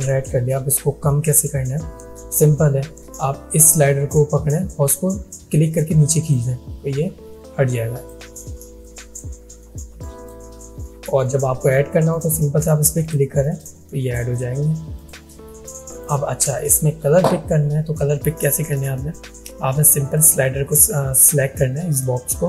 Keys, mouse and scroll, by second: 4.6-6.5 drag, 20.1 click.